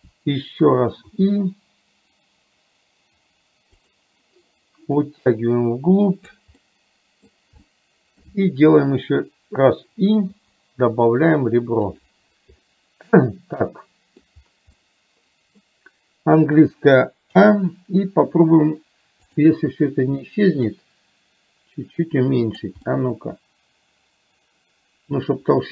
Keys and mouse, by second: 5.1-6.4 drag, 6.6 middle click, 12.8-14.4 middle drag, 14.8 middle click, 20.9-22.6 drag, 23.0-25.7 middle drag.